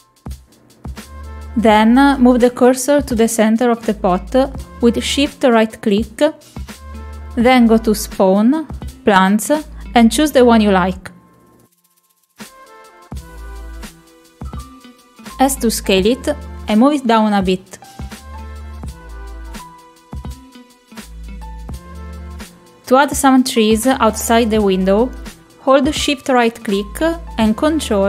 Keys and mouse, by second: 3.3 middle click, 3.7 middle click, 4.1 shift+middle click, 6.0 shift+right click, 7.2-14.7 drag, 15.5 middle click, 16.1 middle click, 17.4 middle click, 18.4 s, 20.2 middle click, 21.6 click, 22.6 click, 22.7 click, 23.9 click, 24.5-25.5 middle drag, 26.3 shift+middle click.